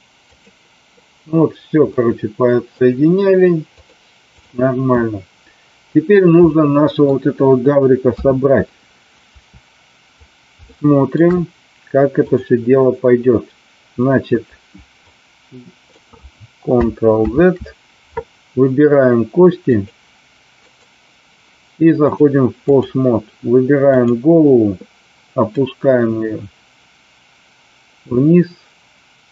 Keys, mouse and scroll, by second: 1.8 middle click, 3.7 click, 5.0-7.0 middle drag, 8.1 KP_3, 10.6-11.1 shift+middle drag, 12.2 click, 15.1-15.8 drag, 17.4 ctrl+z, 19.7 click, 20.6 click, 22.1 click, 23.9 click, 25.6-29.3 drag.